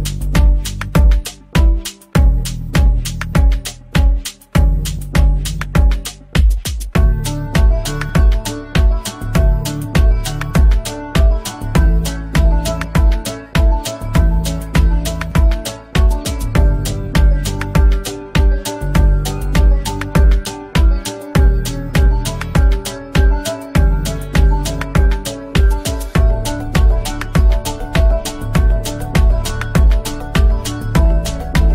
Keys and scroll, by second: 13.0 space, 13.8 Delete, 19.9 Escape, 23.6 F2, 25.6 F3, 27.6 Escape, 30.2 shift+Page_Up, 30.6 Escape.